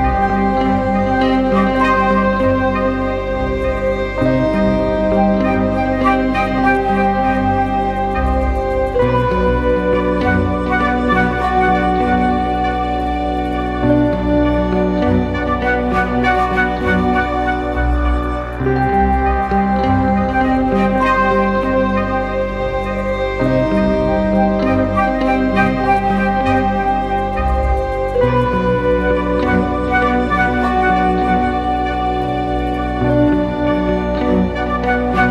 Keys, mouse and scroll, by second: 20.3 double click, 21.1 ctrl+z, 21.9 double click, 33.3-34.8 scroll down 1.